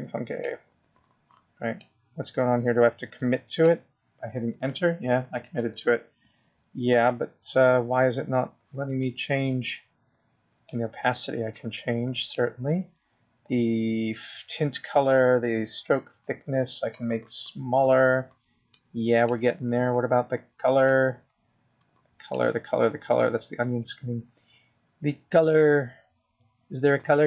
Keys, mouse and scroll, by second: 13.1 click, 18.3 click, 22.5-23.3 scroll down 1, 23.3 click, 23.3-25.6 scroll down 1.